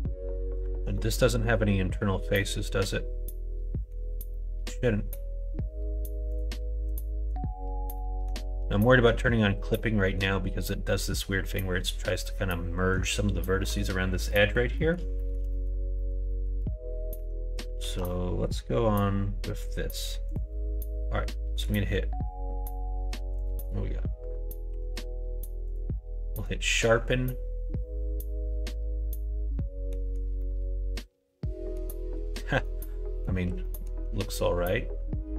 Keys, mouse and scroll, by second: 0.6 alt+z, 0.9 middle click, 2.4-3.9 middle drag, 4.3 middle click, 6.3 click, 6.8 click, 7.9 middle click, 8.8 middle click, 9.8 middle click, 13.6 middle click, 14.2 middle click, 14.7 middle click, 15.1 shift+middle click, 15.5 middle click, 15.9 middle click, 16.2 shift+middle click, 17.1 Tab, 17.8 alt+z, 20.2 click, 21.5-22.9 right drag, 23.6 right click, 24.7 q, 26.4-30.0 middle drag, 30.5-31.8 middle drag, 32.7 middle click, 33.7 middle click, 34.0 Tab.